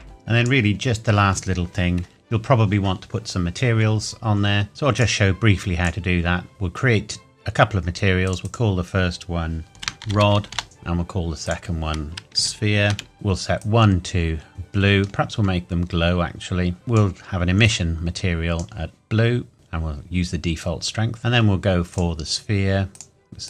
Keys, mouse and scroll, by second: 0.0 click, 1.2-3.1 scroll up 1, 5.0 click, 8.2 click, 9.9 typing, 10.5 Return, 10.6 click, 12.4 shift+s, 13.1 click, 14.8-15.7 scroll down 1, 16.8 click, 21.2-21.9 scroll up 1, 21.9 click.